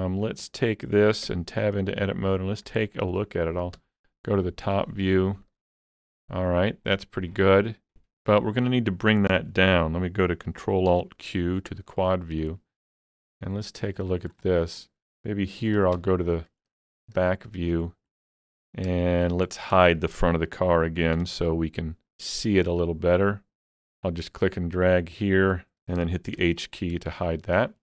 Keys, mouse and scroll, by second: 0.3 click, 1.3 Tab, 3.2 Tab, 3.2-4.9 shift+middle drag, 3.8 KP_7, 4.9 scroll up 2, 5.2 shift+middle click, 10.3 shift+middle click, 10.3 scroll up 1, 10.9 ctrl+alt+q, 12.4 shift+middle click, 13.3 middle click, 13.8 scroll up 2, 14.1 shift+middle click, 16.0 ctrl+KP_1, 17.0 scroll down 2, 17.3 shift+middle click, 18.7-19.0 scroll down 4, 19.0 shift+middle click, 19.5 scroll down 1, 19.8 shift+middle click, 21.4 alt+z, 24.0-27.8 drag, 26.4 h.